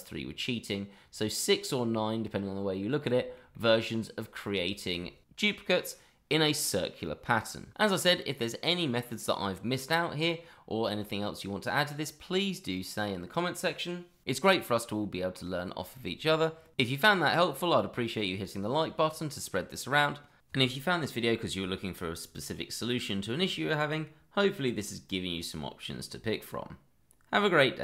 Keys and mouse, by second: 3.1 shift+middle drag, 3.5-4.0 middle drag, 4.7 shift+middle drag.